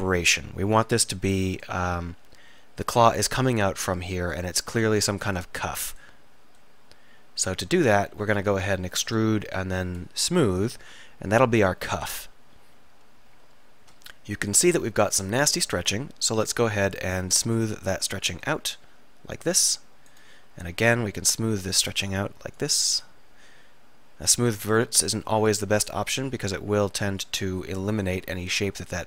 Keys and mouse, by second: 7.8 click, 8.4 middle click, 9.1 middle click, 9.2 middle click, 10.0 middle click, 10.7 middle click, 12.4 KP_3, 15.1 click, 18.1 click, 19.0 middle click, 20.2 click, 20.6-22.6 middle drag, 22.6 click, 23.6 middle click, 23.8-25.2 drag, 25.2 s, 25.8-28.0 middle drag, 28.4-29.0 drag.